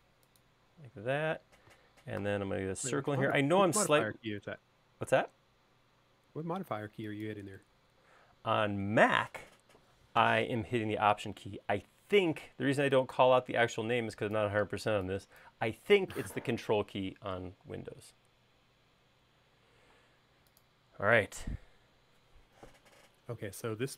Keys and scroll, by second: 2.3 c, 8.5 e, 20.1 space.